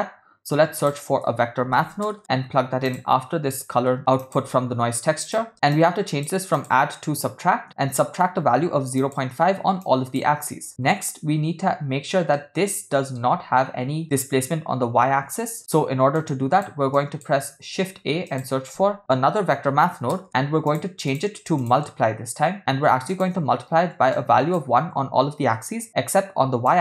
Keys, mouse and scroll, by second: 5.5 middle click, 5.7-6.3 drag, 6.6-9.2 drag, 9.8-10.9 shift+drag, 12.4-13.2 middle drag, 16.2-16.6 drag, 16.9 click, 17.7 shift+a, 21.6-23.3 drag, 24.1-25.5 shift+drag, 26.7-26.8 drag.